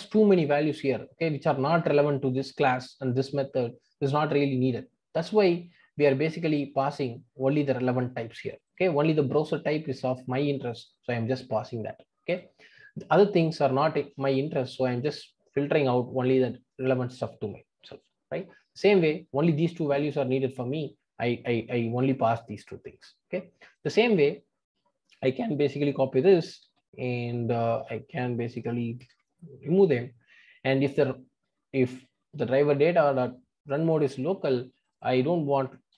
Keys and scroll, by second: 26.6 super+c, 29.8 super+v.